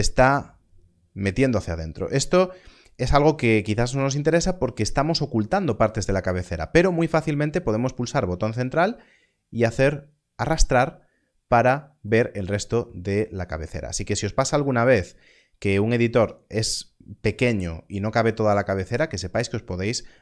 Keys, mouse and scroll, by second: 7.3 middle click, 15.3 middle click, 17.4 middle click.